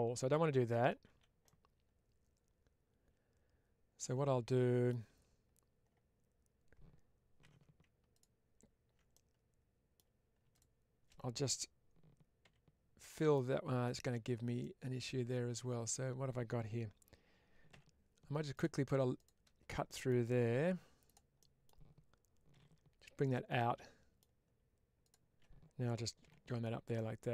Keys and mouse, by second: 0.9 ctrl+z, 1.3-4.8 middle drag, 7.3 2, 9.0 middle click, 12.9 middle click, 14.5-15.8 middle drag, 19.7 middle click, 20.4 1, 20.9 click, 21.3 middle click, 23.1 click, 23.5 middle click, 24.9 shift+click, 26.8 middle click.